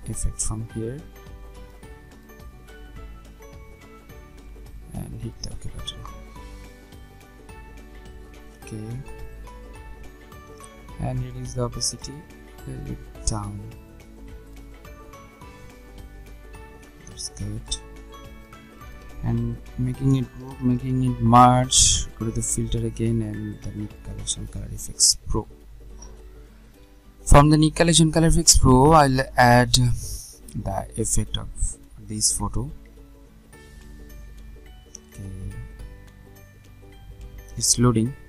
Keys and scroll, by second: 19.7 ctrl+g, 21.4 ctrl+alt+shift+e.